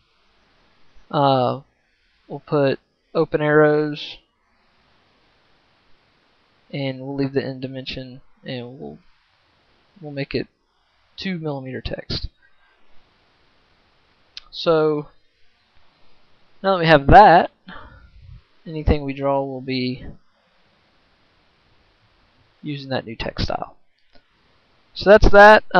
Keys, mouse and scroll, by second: 6.3 right click, 6.6-15.9 right drag, 16.0 right click, 16.2 right click, 16.5 right click, 18.9 click, 19.1 right click, 19.1 click, 19.2 right click, 19.7-22.1 right drag, 22.2-25.7 right drag.